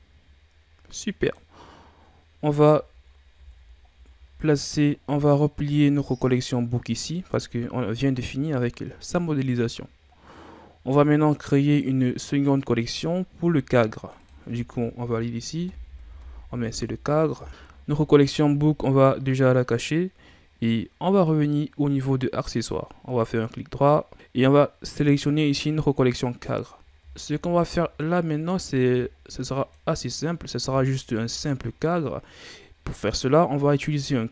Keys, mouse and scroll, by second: 1.7-2.8 scroll up 1, 3.4 ctrl+s, 3.9-6.2 scroll down 7, 6.2 click, 7.2 scroll down 3, 7.4-9.5 middle drag, 9.5-11.2 scroll up 2, 11.2 click, 11.6-13.2 right drag, 13.2 scroll down 4, 13.9 click, 14.2-17.3 drag, 19.6 click, 21.1 click, 23.1 right click, 25.3 click.